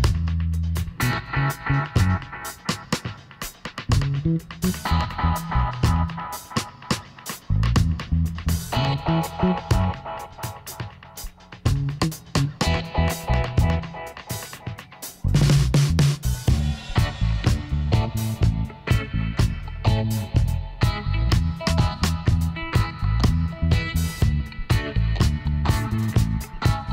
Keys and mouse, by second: 1.0 ctrl+r, 3.5 middle click, 6.4-8.8 drag, 7.1-8.1 right drag, 8.2 i, 10.4 Tab, 11.2 a, 11.4 middle click, 12.4-13.8 middle drag, 14.8-16.9 middle drag, 17.7-21.7 middle drag, 22.3-26.8 middle drag.